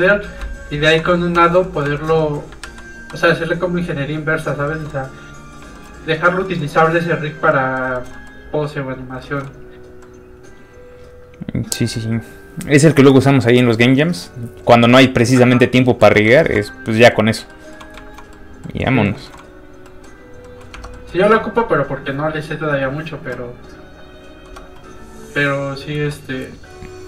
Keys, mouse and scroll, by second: 0.0 click, 0.9 ctrl+i, 1.4 shift+middle click, 1.6 middle click, 1.7 middle click, 2.0 shift+middle click, 2.2 middle click, 2.6 ctrl+a, 3.7 click, 4.3 scroll down 1, 4.7 shift+middle click, 7.0 click, 7.5 middle click, 7.9 shift+middle click, 8.1 middle click, 8.2 middle click, 8.9 click, 9.2 shift+middle click, 9.5-10.0 scroll up 1, 10.0 middle click, 11.9-16.3 scroll up 1, 16.4 shift+middle click, 16.7 middle click, 16.8 middle click, 17.4 scroll down 1, 17.5 middle click, 18.0 shift+click, 18.3 click, 18.4 middle click, 20.7 shift+Tab, 20.9 middle click, 24.5 Tab.